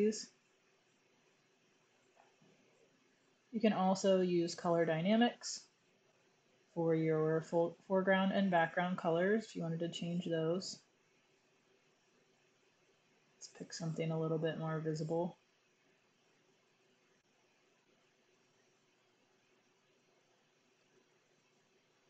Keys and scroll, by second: 13.6 x.